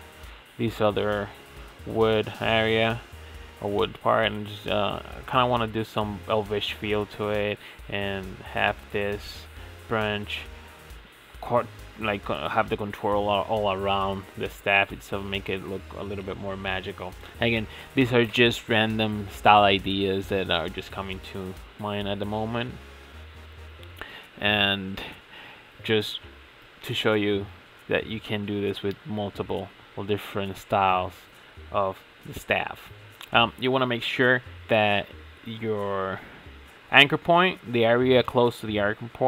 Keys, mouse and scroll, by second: 0.2 click, 0.7 shift+middle click, 1.1 click, 1.3 g, 2.4 shift+middle click, 3.1 e, 3.5 middle click, 3.8 e, 4.1 middle click, 4.3 e, 4.7 click, 4.9 middle click, 5.0 g, 5.5 click, 5.6-6.6 middle drag, 6.6 e, 7.1 middle click, 7.4 g, 7.9 middle click, 8.1 scroll up 1, 8.2 middle click, 8.4-11.6 typing, 8.8 middle click, 9.7-10.0 middle drag, 10.4-10.9 middle drag, 11.2 shift+middle click, 12.0 shift+middle click, 12.2 scroll up 2, 12.3-12.9 shift+middle drag, 12.9 e, 13.4 shift+middle click, 14.0 e, 14.4-15.5 middle drag, 15.5 g, 17.8 middle click, 18.0 Tab, 18.1 click, 18.6 scroll down 2, 18.7 shift+middle click, 18.8 click, 18.9-19.7 middle drag, 19.7 Tab, 20.1 click, 20.5 middle click, 20.6-24.3 typing, 21.3 click, 21.4 middle click, 21.9 middle click, 22.1 click, 22.2 middle click, 22.6 click, 22.7 middle click, 23.3 middle click, 23.5 click, 23.6 middle click, 24.1 middle click, 24.6 middle click, 25.6 Tab, 25.7 click, 26.0 click, 26.2-27.8 shift+middle drag, 27.8 scroll up 6, 27.9 middle click, 28.1 click, 28.2 shift+middle click, 28.3 scroll down 5, 28.4 shift+middle click, 28.5 scroll up 1, 28.6 shift+middle click, 29.1 scroll up 3, 29.2 drag, 29.4 Tab, 29.6 scroll down 6, 29.7 shift+middle click, 30.0 click, 30.3 click, 31.1 click, 31.4 ctrl+e, 31.9 click, 32.2 g, 33.1 shift+middle click, 33.3 click, 33.4 g, 34.1 shift+middle click, 34.3-34.6 scroll down 3, 34.6 ctrl+s, 34.8 ctrl+Tab, 35.0 click, 35.1 middle click, 35.6 click, 35.8 shift+middle drag, 35.9 scroll up 4, 36.1-36.7 shift+middle drag, 36.7 scroll up 1, 36.9 click, 37.0 right click, 37.3 click, 38.3 shift+middle click, 38.4 Tab, 38.5 shift+middle click, 38.8 scroll down 1, 39.1 2.